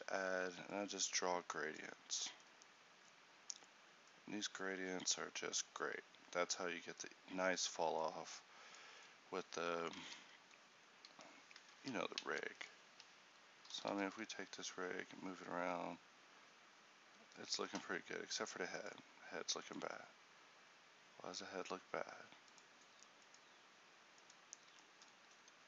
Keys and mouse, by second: 1.1-10.1 drag, 10.1 ctrl+t, 13.8 r.